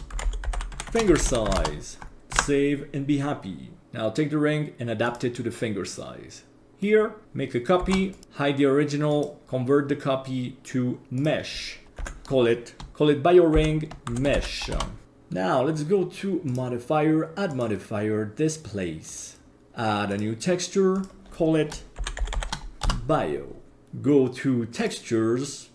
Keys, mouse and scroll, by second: 2.4 ctrl+s, 6.7 middle click, 7.8 shift+d, 9.1 click, 9.4-11.3 drag, 11.9 F2, 16.5 click, 17.5-19.2 drag, 20.1 click, 20.9-22.8 drag, 23.7-24.8 scroll down 3, 24.8 click.